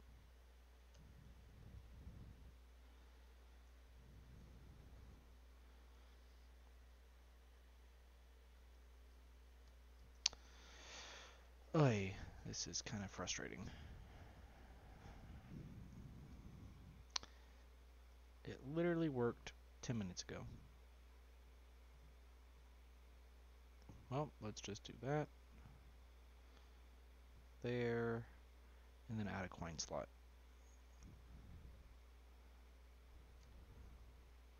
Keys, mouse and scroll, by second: 3.6 Tab, 4.2 click, 4.9 click, 5.4 click, 6.1 shift+click, 7.8 y, 10.2 ctrl+z, 13.6 ctrl+z, 14.5 click, 16.1 Delete, 16.2 scroll down 1, 16.5-17.0 middle drag, 17.0-17.5 scroll down 2, 17.5 middle drag, 17.8 scroll up 1, 18.0 click, 19.2 s, 24.0 click, 25.6 click, 28.5 click, 29.3 click, 30.2 s, 31.9 click, 33.9 click.